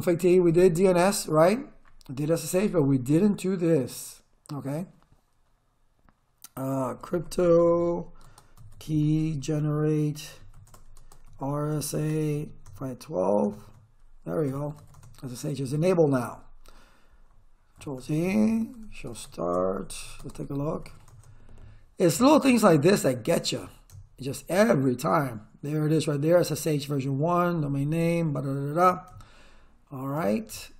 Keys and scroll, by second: 0.0-0.1 typing, 6.7-12.4 typing, 14.3-15.3 typing, 17.8 ctrl+z, 18.0 Return, 18.6-21.4 typing, 28.0 Return.